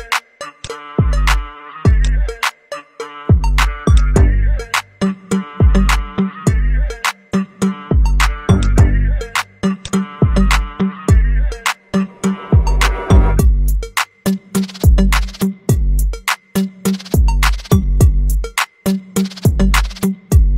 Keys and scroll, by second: 18.3-19.8 space.